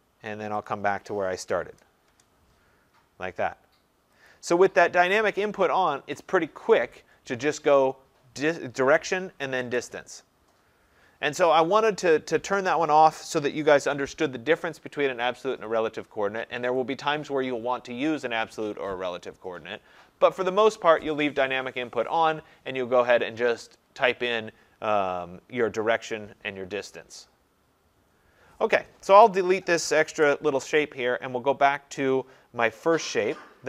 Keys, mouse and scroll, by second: 0.7 click, 1.8-2.1 typing, 2.1 Return, 4.3 click, 30.2 Delete, 31.7-32.4 scroll, 32.4-33.6 scroll.